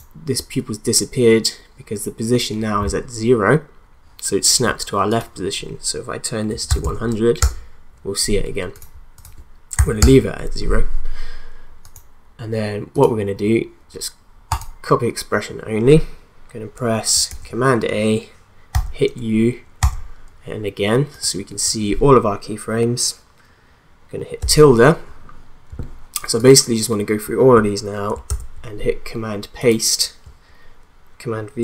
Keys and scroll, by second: 6.2-7.1 typing, 7.4 Return, 9.8 0, 10.0 Return, 17.3 ctrl+a, 18.7 u, 28.3 ctrl+v.